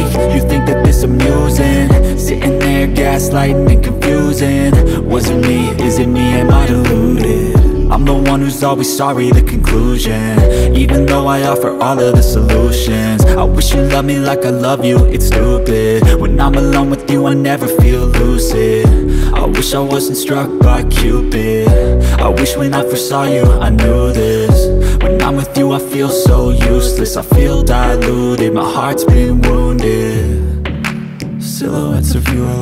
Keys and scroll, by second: 10.3 ctrl+l.